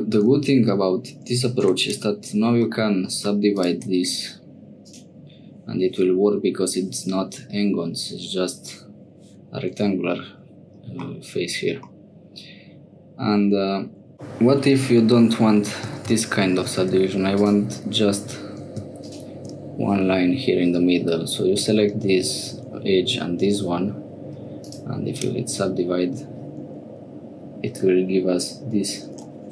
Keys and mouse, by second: 1.6 3, 1.8 right click, 2.7 middle click, 4.7-10.7 right drag, 11.9-14.0 middle drag, 16.2 ctrl+z, 16.9 2, 17.4 click, 19.0 shift+click, 21.9 click.